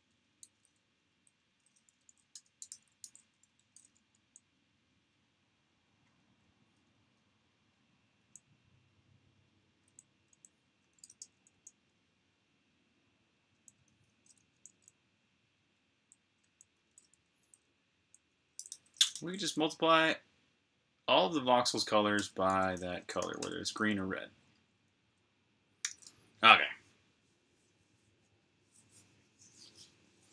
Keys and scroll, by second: 0.9-2.6 typing, 3.7-4.0 typing, 6.1-8.5 typing, 10.8-11.8 typing, 13.1-19.5 typing, 21.8-23.7 typing, 25.6 super+r, 26.0-26.7 typing, 26.2 super+h, 27.0 super+h.